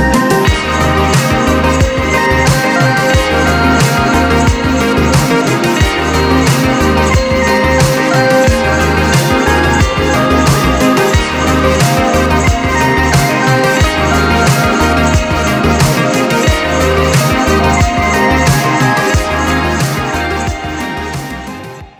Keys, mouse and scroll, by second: 5.5 click, 5.8-6.2 scroll down 2, 6.2-9.2 middle drag, 10.6-11.0 scroll up 2, 11.0-11.7 scroll down 2, 11.7-12.4 middle drag, 12.4-12.9 scroll down 3, 12.9-17.1 middle drag.